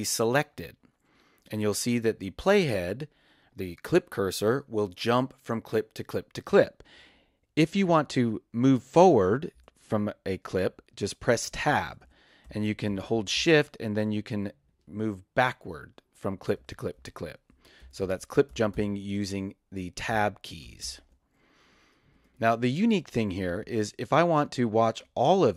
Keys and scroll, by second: 9.5 Tab, 11.6 shift+Tab, 16.5 Tab, 17.5 shift+Tab, 20.1 shift+Tab, 20.5 shift+Tab, 23.1 space.